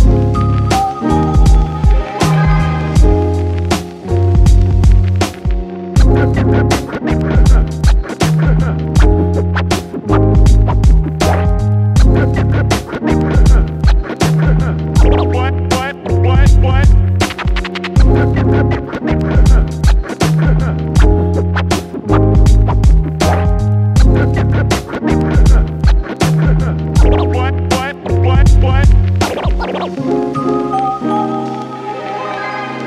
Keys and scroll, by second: 6.1-8.6 typing, 23.0-23.8 typing, 25.5 f, 28.2 d, 28.7 space, 29.3 f, 30.1 4.